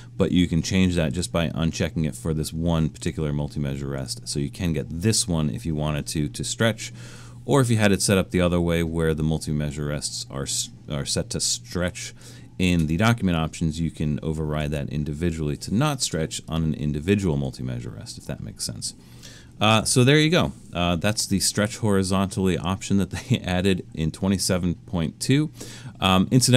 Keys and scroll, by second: 14.6 super+z, 19.8 alt+super+a.